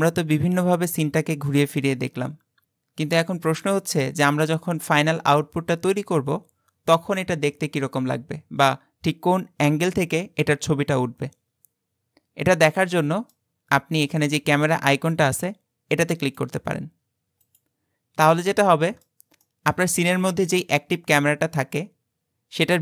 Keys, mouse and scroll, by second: 16.1 click, 17.5 click, 18.5-22.8 middle drag.